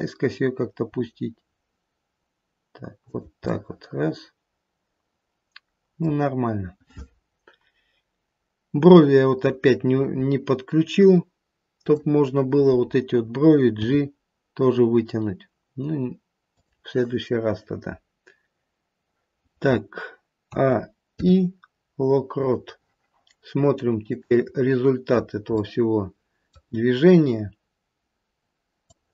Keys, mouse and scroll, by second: 0.8 g, 3.4 middle click, 4.6-5.9 middle click, 5.8 middle click, 9.6-11.7 scroll up 1, 11.7 click, 11.7-12.4 scroll up 1, 13.8 g, 17.4-18.9 scroll down 1, 20.4 scroll down 1, 20.4 a, 21.0 i, 24.1 click, 24.5-25.5 scroll down 2, 25.5 middle click, 25.5-27.1 scroll down 1, 28.9 click.